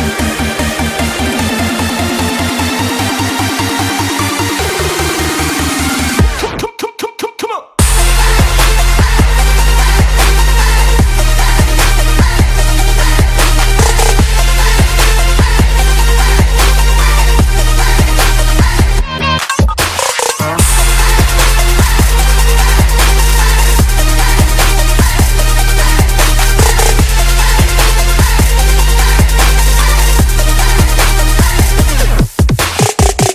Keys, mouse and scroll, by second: 6.3 right click, 6.4 right click, 7.0-10.7 drag, 10.8 click, 11.5-13.2 typing, 11.7 click, 13.6 Return, 14.6-17.2 drag, 17.2-18.0 typing, 18.7-20.2 drag, 22.1-24.8 shift+drag, 25.3 ctrl+c, 25.7 click, 26.6-33.3 drag.